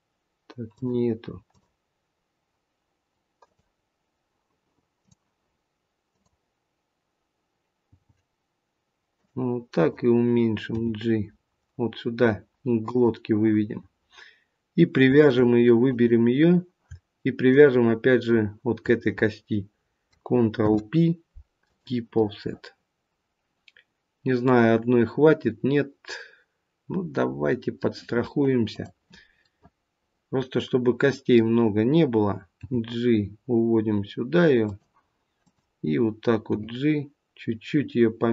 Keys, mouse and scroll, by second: 1.4 click, 3.4 click, 6.1 click, 7.8 g, 9.7 click, 10.7 g, 15.2 shift+click, 15.7 click, 17.4 shift+click, 20.6 ctrl+p, 22.0 middle click, 22.4 middle click, 28.6 click, 29.3 middle click, 35.3 g, 35.4 click, 36.4 g.